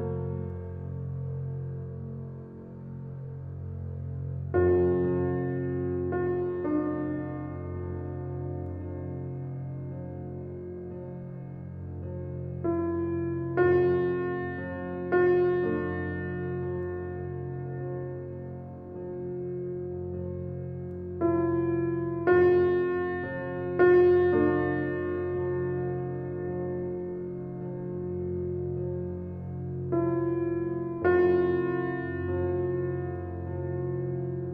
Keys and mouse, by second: 4.1 shift+s, 5.5 Return, 6.5 Escape, 7.3-8.6 drag, 9.0 shift+d, 9.9 Return, 11.7 click, 12.8-14.3 drag, 14.7-15.4 typing, 16.0 Escape, 17.0-19.5 typing, 19.9-21.4 alt+drag, 21.3-22.0 typing, 21.5 alt+click, 22.1 alt+a, 22.5-27.7 alt+drag, 23.9 typing, 26.0-28.3 typing, 28.2 alt+click, 29.0 ctrl+alt+middle click, 29.4 ctrl+alt+click, 29.8 middle click, 29.9 Tab, 30.3 click, 30.7 middle click, 31.0 Tab, 31.9 click, 32.6 Tab, 33.3 Tab, 34.2 shift+s.